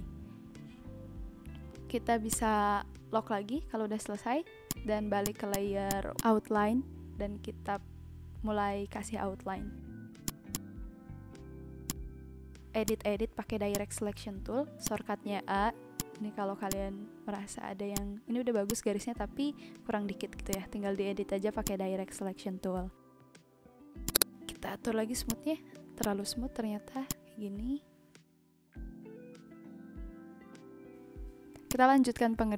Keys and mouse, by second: 2.3 click, 2.9 b, 4.6 click, 7.0 click, 9.9 a, 10.2 click, 12.8 click, 13.7 click, 14.8 click, 15.9 click, 17.9 click, 19.3 b, 20.5 click, 21.6 click, 24.0 click, 25.2 click, 27.0 click, 31.6 click.